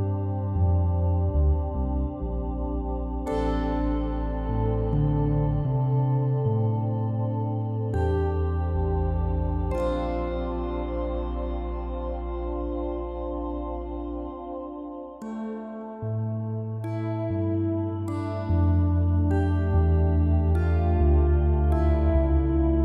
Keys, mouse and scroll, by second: 1.0 shift+z, 1.4 click, 1.8 Tab, 2.0 click, 2.2 click, 2.4 click, 3.0 KP_7, 3.8 KP_1, 4.2 scroll down 5, 4.5-5.5 middle drag, 5.5 g, 6.5 click, 6.7 click, 7.0 g, 7.8 KP_1, 8.4 scroll up 4, 8.7 shift+middle click, 9.1 click, 9.6 g, 11.8-12.8 middle drag, 12.8 drag, 14.0 KP_1, 14.6 shift+d, 16.1-16.8 middle drag, 16.8 click, 17.4 KP_7, 18.1 g, 18.9 r, 19.5 click, 19.9 r, 20.9 click, 21.0 r.